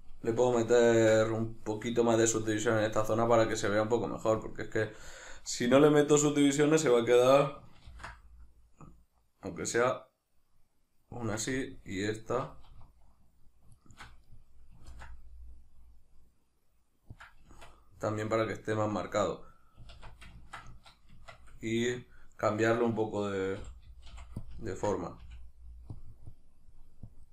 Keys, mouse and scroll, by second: 0.4 Tab, 4.4 click, 5.1-11.3 shift+middle drag, 7.9 ctrl+b, 11.3 click, 11.6 alt+right drag, 12.0 alt+shift+right click, 13.7 alt+shift+right click, 14.3-17.3 middle drag, 14.9 ctrl+b, 17.3 click, 17.5 Tab, 18.0-20.0 middle drag, 20.0 alt+q, 20.7 shift+middle click, 21.1 Tab, 21.3 middle click, 23.6 g, 24.5 click, 24.6 ctrl+middle click, 25.2 f, 26.0-27.3 drag.